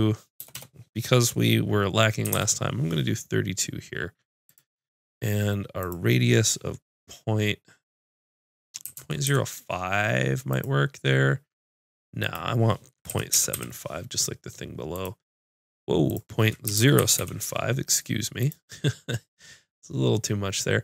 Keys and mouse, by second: 0.6 BackSpace.